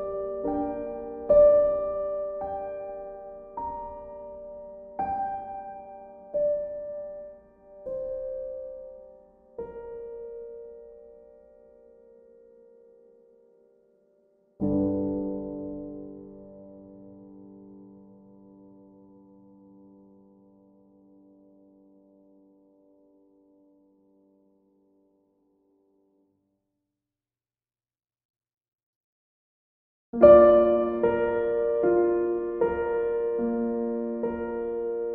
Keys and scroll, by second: 8.4 ctrl+z, 11.5 e, 25.3 b.